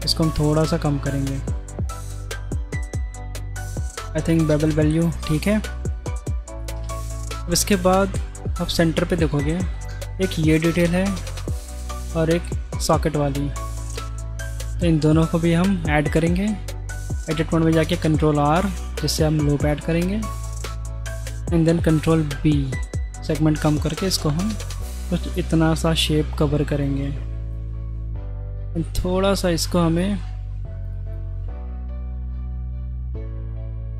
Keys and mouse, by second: 1.7-2.3 shift+middle drag, 3.4-4.8 middle drag, 5.7-6.1 shift+middle drag, 6.6 middle click, 6.7 Tab, 7.0 middle click, 7.7 middle click, 8.6 middle click, 9.6 middle click, 13.5 shift+middle click, 13.9 middle click, 14.5 Tab, 14.9 click, 18.5 ctrl+r, 21.8 ctrl+b, 27.1 middle click, 29.4 click, 30.2 ctrl+r.